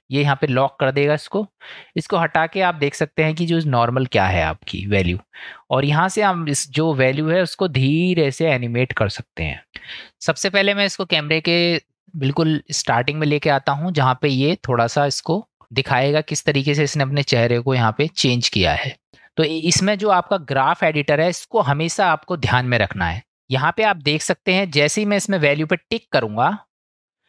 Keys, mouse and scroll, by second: 2.5 click, 6.1-9.6 drag, 10.1-11.6 drag, 13.5 click, 26.9 click.